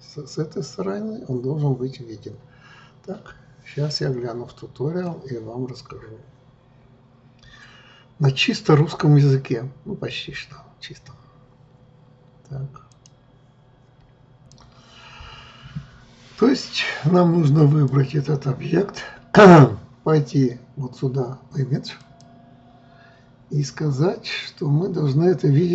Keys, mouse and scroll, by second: 17.7-20.7 drag, 22.1-25.2 drag.